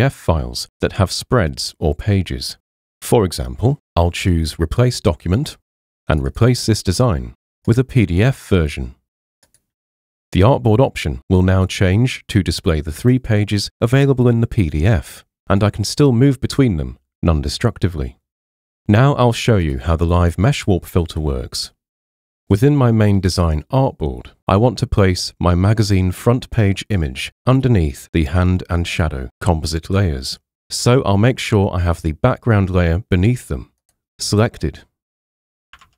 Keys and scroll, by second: 35.8 super+Tab.